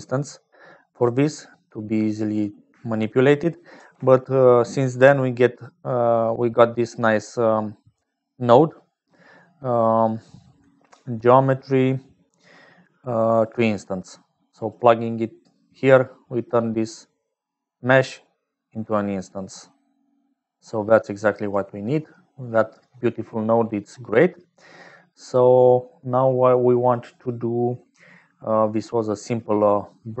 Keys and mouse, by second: 0.0-30.2 typing, 0.4 middle click, 20.8 click, 22.1 click, 24.4 click, 25.2 click.